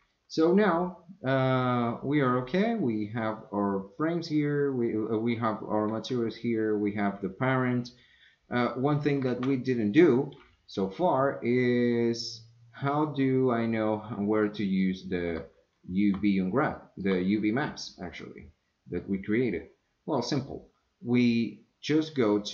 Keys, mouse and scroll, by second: 0.1 middle drag, 9.3 Tab, 14.0 middle click, 14.8 middle click, 16.8 shift+middle click, 18.1 middle click, 21.9 click.